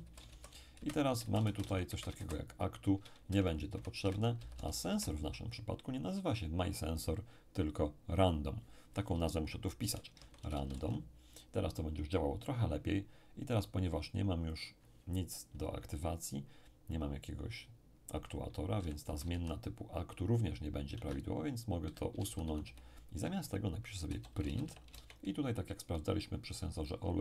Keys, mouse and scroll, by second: 0.3 Down, 0.8 Up, 1.2 Down, 1.6 Delete, 1.9 Up, 2.2 Down, 3.3 Delete, 3.7 Up, 4.0 End, 4.4 Left, 4.5 Left, 4.9 Left, 9.8-10.7 typing, 14.5 click, 18.8 End, 19.0 Left, 20.9 Home, 21.8 End, 22.2 Left, 22.4 Left, 22.6 Left, 24.0-24.9 typing.